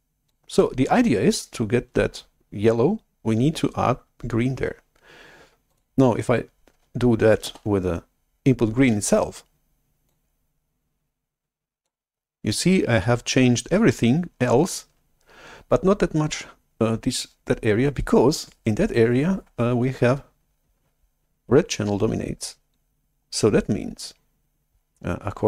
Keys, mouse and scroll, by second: 5.8 click, 7.6 shift+super+F11, 10.1-11.8 drag.